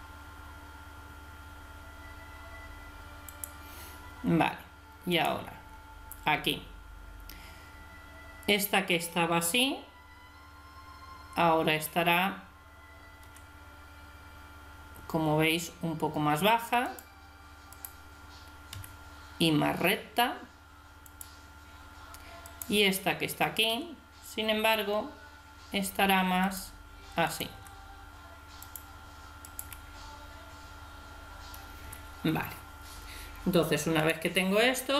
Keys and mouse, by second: 5.1 right click, 13.2 r, 17.8-19.1 right drag, 18.7 r, 22.5 right click, 23.7 r, 27.3 right click, 27.6 r, 29.4 right click, 29.6 r, 34.0 right click.